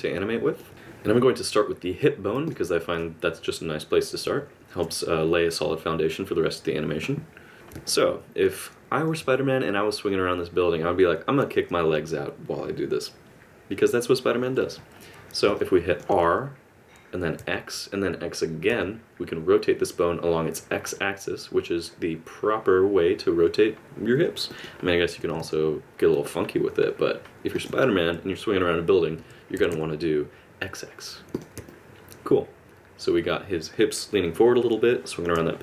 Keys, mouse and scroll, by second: 2.5 click, 7.5 click, 7.9 middle click, 15.5 middle click, 16.2 r, 25.0 r, 29.1 r, 31.7 middle click.